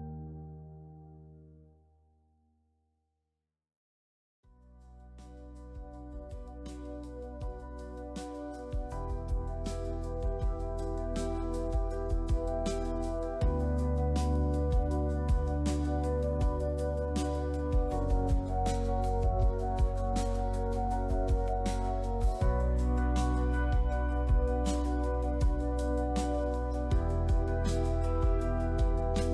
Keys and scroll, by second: 0.1 shift+w, 4.2 Escape, 8.1 shift+w, 17.0 Escape, 22.1 shift+w, 26.3 Return, 28.7 j.